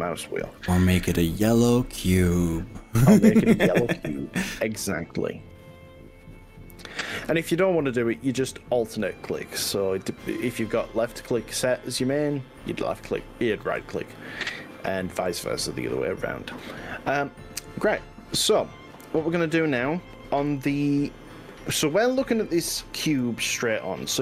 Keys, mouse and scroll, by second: 9.1 click, 10.5 ctrl+z, 20.5 click, 22.9-24.2 middle drag.